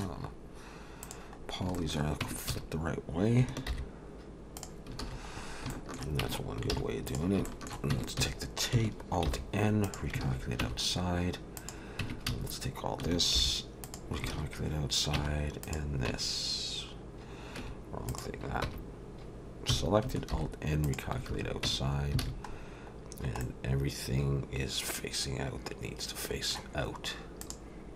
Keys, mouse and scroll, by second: 0.2-1.0 scroll up 1, 1.0 click, 1.0 scroll up 1, 1.4-1.7 scroll down 3, 1.7 shift+middle click, 2.2 Tab, 2.5 a, 3.7 alt+n, 5.0 alt+a, 5.3-5.7 scroll up 3, 5.7 shift+middle click, 6.2 Tab, 6.7 alt+a, 7.1 click, 7.5 shift+middle click, 7.9 Tab, 8.2 a, 9.3 alt+n, 10.3 alt+a, 10.6 Tab, 11.6 click, 12.0 Tab, 12.3 a, 13.4 alt+n, 14.3 alt+a, 15.2 Tab, 15.6 click, 16.1 Tab, 17.6 Tab, 18.1 click, 18.6 Tab, 19.7 a, 20.3 alt+n, 21.3 alt+a, 21.7 Tab, 21.9-22.7 scroll down 4, 22.2 alt+a, 23.4 middle click, 27.4 click.